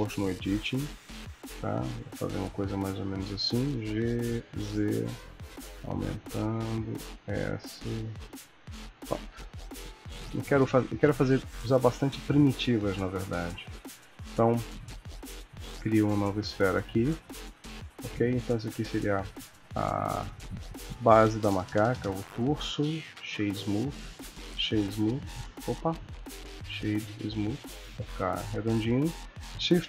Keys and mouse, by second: 3.6 g, 7.1 s, 9.0 Tab, 10.0 KP_1, 11.8 shift+a, 14.8 g, 15.8 s, 18.6 click, 21.5 ctrl+middle click, 22.3 right click, 23.9 right click, 25.5 click, 26.0 right click, 29.6 shift+a.